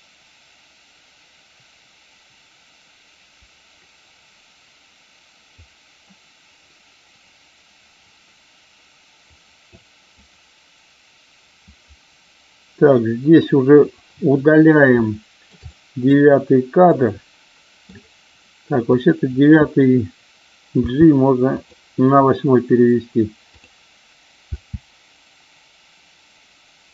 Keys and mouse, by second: 9.7-10.1 drag, 14.9-15.4 shift+middle drag, 15.7 middle click, 16.8-17.8 middle drag, 18.8-19.3 drag, 20.7 g, 23.4 click, 24.6 space.